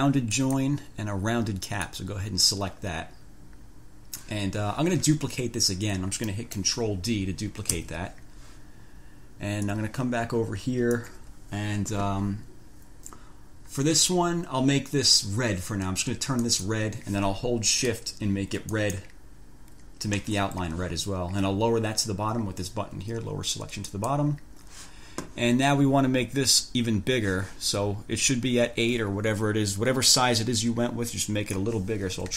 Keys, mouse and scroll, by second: 0.5 click, 1.9 click, 6.5 click, 7.9 ctrl+d, 9.9-11.4 scroll up 2, 16.6 click, 18.9 shift+click, 24.1 click, 31.3 click, 32.1-32.3 typing.